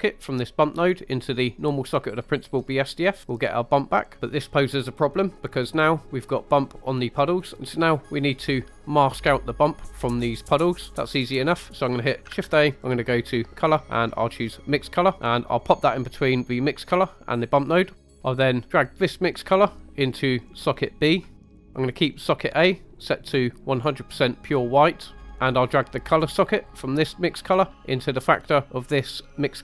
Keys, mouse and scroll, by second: 0.3-2.2 drag, 7.5 middle click, 7.5 click, 12.3 shift+a, 17.0 click, 18.0 middle click, 18.2-18.6 scroll up 2, 18.6 middle click, 19.0 click, 20.5 click, 20.7 click, 22.2 click, 25.2 scroll down 1, 25.2 middle click, 26.7-29.6 drag.